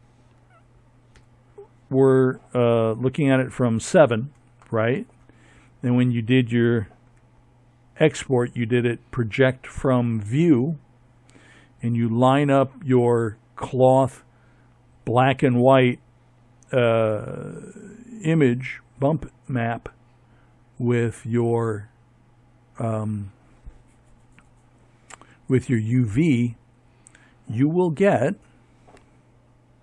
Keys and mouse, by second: 4.8 Tab, 28.6 ctrl+Right.